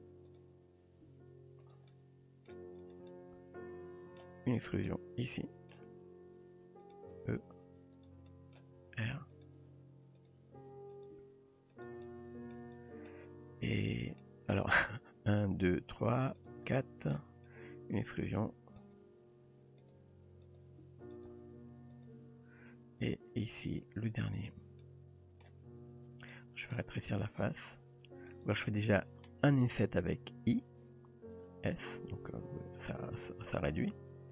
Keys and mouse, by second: 1.1 g, 2.0-2.5 middle drag, 2.9 click, 3.1-4.2 middle drag, 4.9-5.8 middle drag, 6.0 r, 7.3 e, 8.3 middle click, 8.8 r, 9.5 g, 10.5 r, 11.2 g, 12.1-12.5 middle drag, 12.8 middle drag, 14.2 middle click, 16.4 click, 16.7-17.1 middle drag, 18.0 r, 19.2 e, 20.0 r, 20.8 g, 21.4 r, 24.8-25.4 middle drag, 26.3-26.7 middle drag, 27.2 s, 30.1 i.